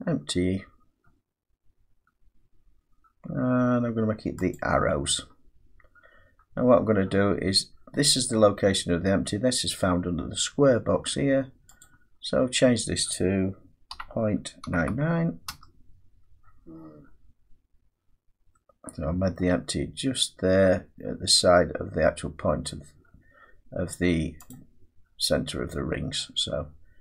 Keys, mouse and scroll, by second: 4.5 click, 11.8 click, 13.9-14.6 typing, 15.5 Return, 19.3 middle click, 21.3 middle click, 22.2-23.3 scroll down 7, 23.7-24.5 scroll down 1, 24.5 click, 25.3-25.8 scroll down 1, 26.2 middle click.